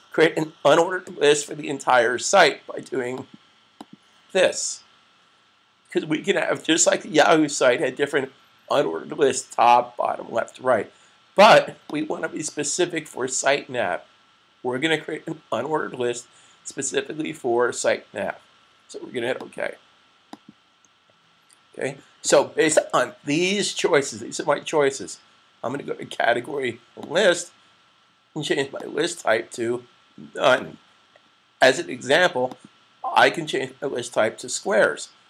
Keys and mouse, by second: 3.0 click, 11.7 click, 19.1 click, 26.8 click.